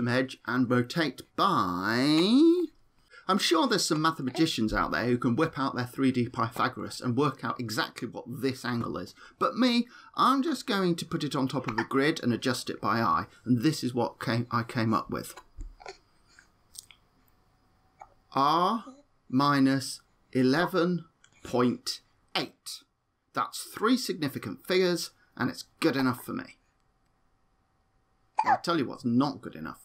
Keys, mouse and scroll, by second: 1.6 r, 10.3 r, 14.5 r, 18.6 r.